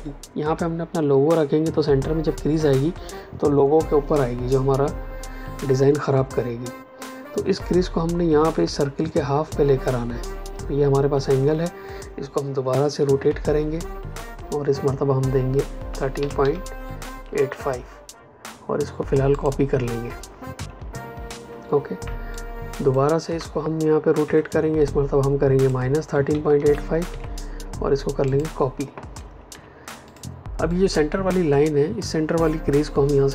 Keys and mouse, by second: 13.1 r, 13.4 KP_Enter, 15.8 KP_1, 16.3 KP_Decimal, 17.0 KP_8, 19.2 click, 22.2 ctrl+click, 24.1 KP_Enter, 25.5 click, 26.2 Left, 27.0 KP_Subtract, 28.2 click, 29.4 v, 30.0 click.